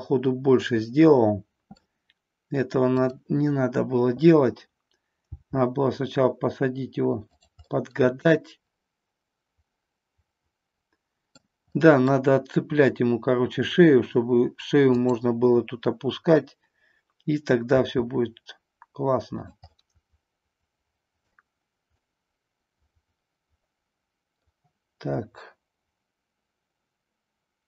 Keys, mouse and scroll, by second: 0.8 middle click, 3.0 click, 5.2 g, 7.7-11.5 middle drag, 11.8 scroll up 1, 11.9 middle click, 12.1 scroll down 1, 17.8 r, 19.8-21.3 middle drag, 22.1-24.6 middle drag.